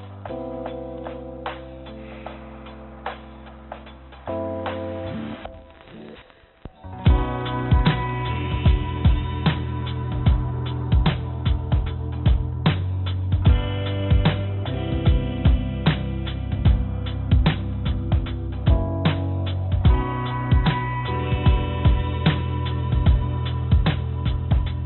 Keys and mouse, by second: 0.1 KP_0, 7.0 g, 7.9 click, 8.6 g, 17.5-18.7 drag, 20.1 click, 22.5 click, 23.0-24.8 drag.